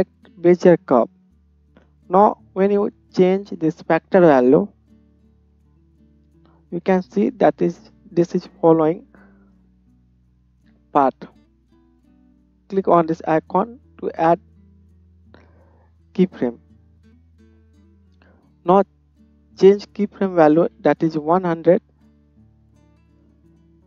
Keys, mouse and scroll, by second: 6.0-11.0 drag, 11.0-13.2 middle drag, 13.2 click, 13.3-18.6 middle drag, 18.6-23.8 drag, 21.1 KP_0.